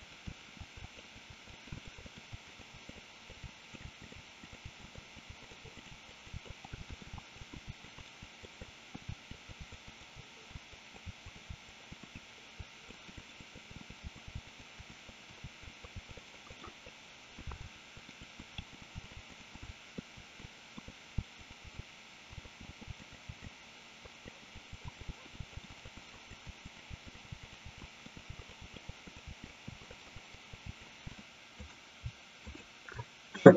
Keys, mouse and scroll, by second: 0.1 shift+middle click, 0.6 e, 0.8 e, 1.1 click, 1.5 e, 1.5 middle click, 1.8 shift+middle click, 2.0 click, 2.1 middle click, 2.3 g, 2.9 click, 3.3 click, 3.4-5.9 typing, 3.8 click, 4.0 click, 4.8 middle click, 4.8 scroll up 1, 5.5 click, 6.2 click, 6.5 middle click, 6.6 scroll down 1, 6.8 shift+middle click, 7.1 e, 7.5 middle click, 7.6 g, 7.8 click, 8.1 right click, 8.7 middle click, 9.1 r, 9.3 click, 9.5 click, 9.6 g, 10.0 click, 10.1 g, 10.5 middle click, 10.9 click, 11.0 g, 11.3 click, 11.7 click, 11.9 middle click, 12.1 click, 12.6 e, 12.9 middle click, 13.5 click, 13.9 click, 14.0-15.9 typing, 14.1 click, 14.6 click, 15.1 middle click, 15.6 click, 15.7 middle click, 16.2 click, 16.2 right click, 18.0 ctrl+z, 18.0 click, 18.4 click, 18.6-21.8 typing, 18.8 click, 19.0 click, 19.4 middle click, 19.7 middle click, 20.4 middle click, 21.5 click, 21.8 middle click, 22.4 middle click, 22.6 middle click, 22.8 g, 23.0 click, 23.5 middle click, 24.2 click, 24.5 click, 24.7 click, 24.8 g, 25.1 middle click, 25.3 click, 25.4 g, 25.6 middle click, 25.7 click, 25.7 right click, 25.9 click, 26.3 click, 26.4 g, 26.8 click, 27.1 click, 27.6 g, 27.8 middle click, 28.1 click, 28.3 g, 28.5 click, 28.6 g, 28.7 click, 28.9 middle click, 29.1 click, 29.3 g, 29.4 click, 29.5 middle click, 30.2 middle click, 30.5 click, 30.7 g, 31.1 middle click, 32.5 shift+click.